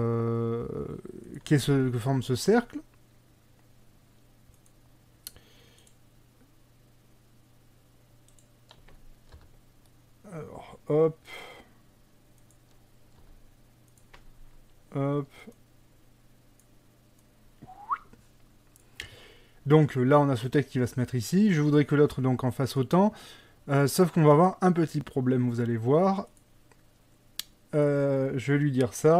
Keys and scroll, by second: 9.4 g, 13.3 g.